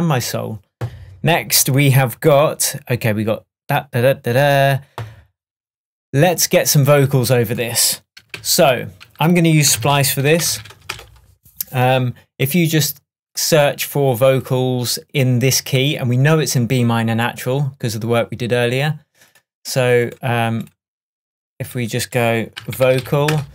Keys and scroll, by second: 8.4 super+t, 9.8 alt+space, 9.9-10.8 typing, 22.6 v, 23.3 Return.